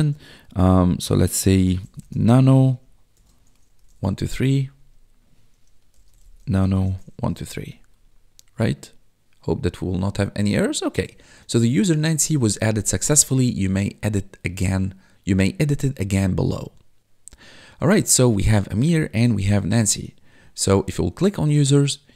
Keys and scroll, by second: 1.5-4.6 typing, 5.6-7.9 typing.